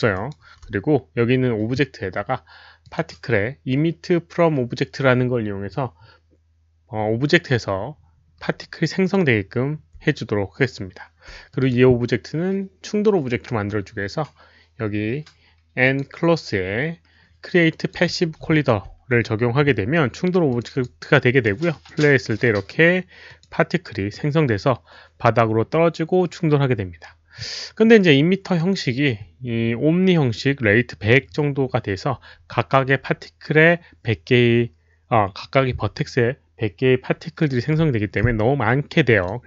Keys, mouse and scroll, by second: 0.1 alt+right click, 2.8 click, 2.9 alt+right click, 5.3 alt+click, 5.3 alt+right click, 9.0 alt+click, 9.0 alt+right click, 11.5 drag, 15.8 click, 17.7 click, 18.5 alt+click, 20.5 click, 20.7 alt+click, 21.7 alt+click, 23.3 alt+click, 26.6 alt+click, 28.4 alt+click, 34.1 click, 39.2 click.